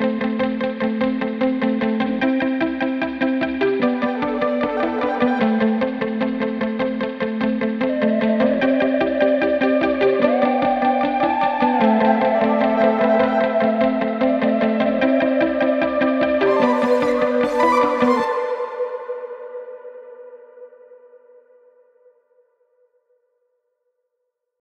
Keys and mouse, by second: 4.3 click, 6.5 ctrl+shift+click, 12.1-15.6 drag, 21.8-24.6 drag.